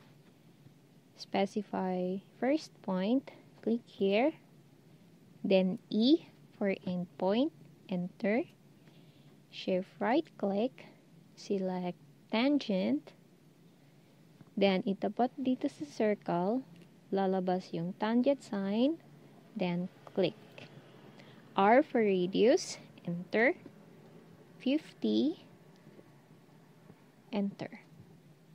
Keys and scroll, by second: 5.8 e, 21.6 r, 24.5-25.2 typing.